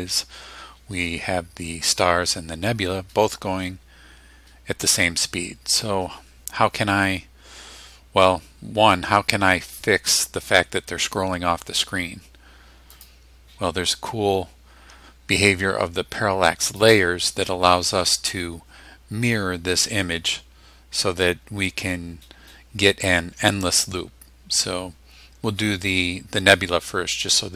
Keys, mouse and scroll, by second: 12.9 click, 16.7 click.